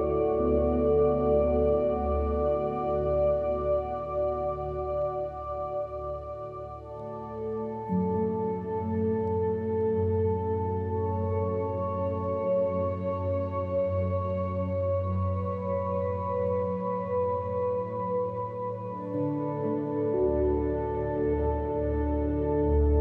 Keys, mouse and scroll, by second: 0.0 click, 0.3 click, 0.7 click, 2.0 click, 2.5 BackSpace, 2.7 click, 3.6 click, 4.0 drag, 8.0 middle click, 8.8 middle click, 9.1 middle click, 9.3 alt+click, 9.9 middle click, 10.2 middle click, 10.4 click, 10.9 click, 11.5 click, 13.1 click, 13.7 shift+click, 14.4 shift+a, 15.3 click, 15.8 shift+drag, 16.1 click, 16.4 ctrl+h, 16.5 g, 17.1 click, 20.0 click, 20.6 ctrl+shift+d, 21.3 ctrl+click, 22.9 click.